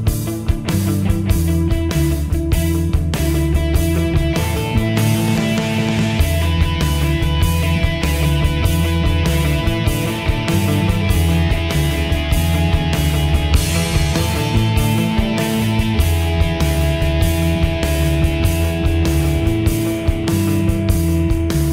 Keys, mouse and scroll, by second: 5.9 typing, 12.1 typing, 14.9 typing, 20.7 Delete.